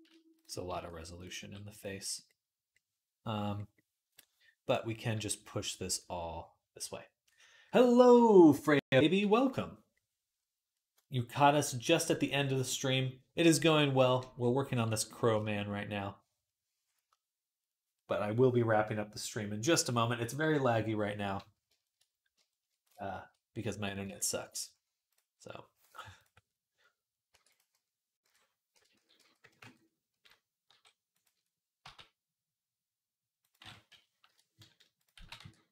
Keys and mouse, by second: 0.5 s, 1.2 g, 24.9 click, 27.1 e, 28.0 ., 28.7 s, 30.5 g, 31.7 g, 33.7 ., 34.8 click, 34.9-35.7 middle drag, 35.0 x.